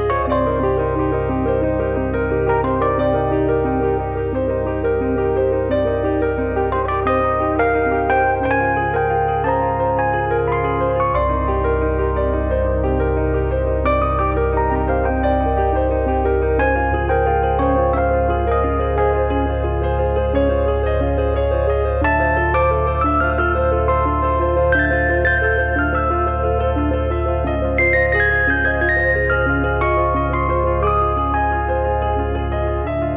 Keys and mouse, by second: 0.3 click, 3.5 click, 4.5 click, 5.5 click, 5.8 click, 6.6 click, 6.9 click, 9.1 click, 10.1 click, 10.3 click, 11.1 click, 12.4 click, 15.9 click, 17.4 click, 18.2 click, 18.9 click, 19.2 click, 20.0 click, 21.1 click, 22.3 click, 22.6 click, 23.2 click, 23.6 click, 24.3 click, 24.6 click, 25.3 click, 25.6 click, 32.1 click.